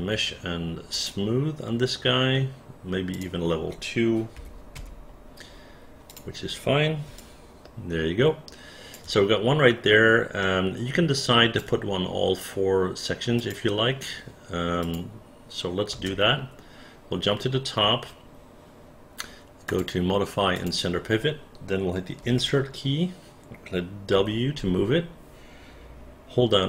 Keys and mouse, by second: 3.2 click, 4.4 KP_2, 4.8 Return, 6.1 click, 7.2-9.0 alt+drag, 10.4 alt+middle click, 11.2 alt+click, 13.4 click, 14.8 click, 16.0 space.